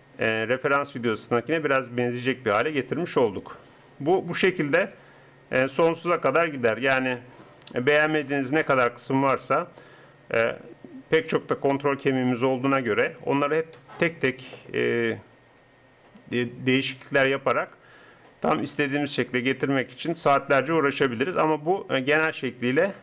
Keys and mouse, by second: 4.3-5.3 drag, 16.8 click, 22.0 click.